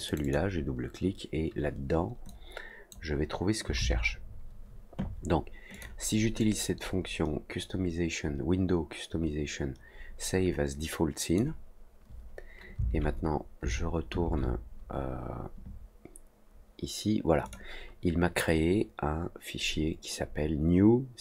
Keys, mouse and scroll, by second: 0.0 click, 0.2 click, 2.2 click, 5.7 click, 6.3-11.3 drag, 17.4 click.